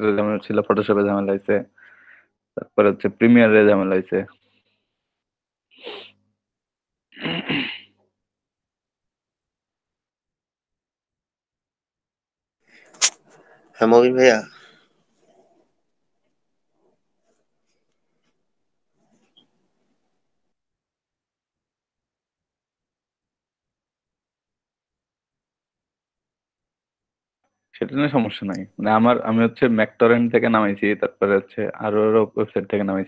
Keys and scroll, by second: 0.4 Return, 12.6 ctrl+a, 13.1 ctrl+c, 17.8 ctrl+v, 18.4 Return.